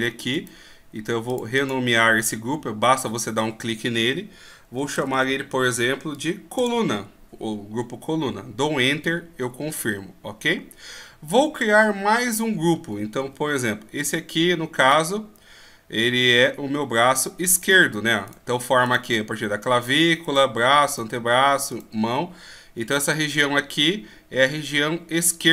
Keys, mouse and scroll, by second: 0.3 right click, 1.6 click, 13.2 KP_1, 14.8 right click.